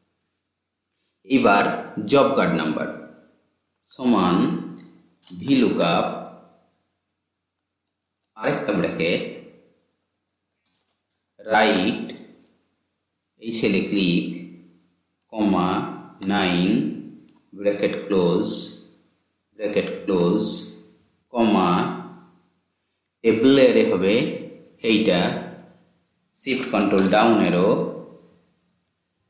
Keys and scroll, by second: 26.4 ctrl+shift+Down.